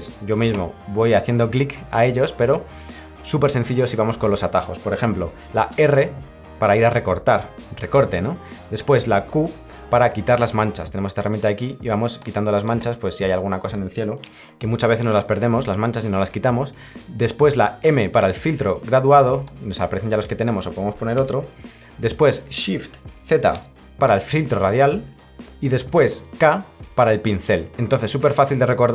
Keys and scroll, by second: 23.5 z.